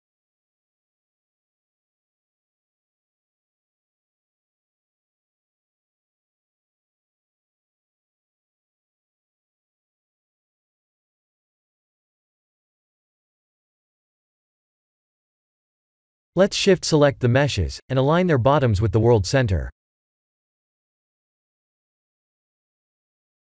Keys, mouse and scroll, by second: 0.1-1.7 middle drag, 2.6-3.4 shift+middle drag, 6.6-11.0 drag, 11.4 click, 15.8 click, 16.2 shift+click, 16.9 g, 17.2 z, 17.4 1, 17.9 KP_Enter, 18.8 click, 19.1-19.6 middle drag, 20.1 shift+a, 21.7 s, 22.7 click.